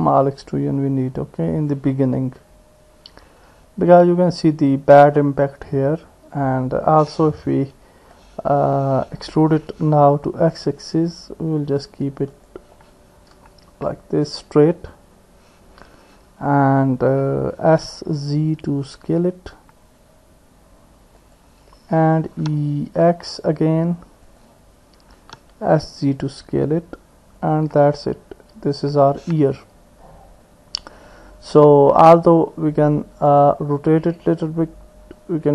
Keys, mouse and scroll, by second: 2.0-3.6 drag, 3.6 middle click, 3.9 click, 5.5-6.9 drag, 6.9 middle click, 8.2 click, 9.7 e, 13.3 KP_1, 17.7 s, 22.3 e, 25.1 s, 33.3 click, 34.4-35.5 drag.